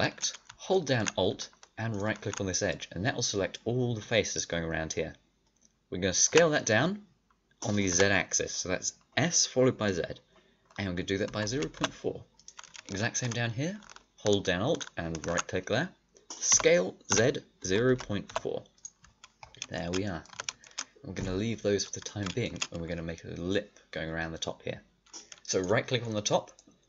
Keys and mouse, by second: 0.7 alt+middle click, 6.2 s, 16.4 s, 19.1 click, 20.3 a, 22.0-23.7 drag, 25.5-26.5 right drag.